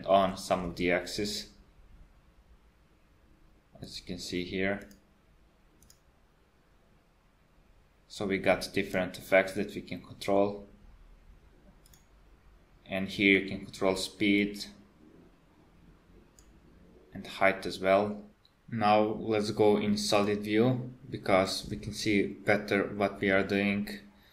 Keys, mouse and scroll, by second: 0.7 space, 3.9 click, 5.0 click, 5.9 click, 11.9 click, 14.4 click.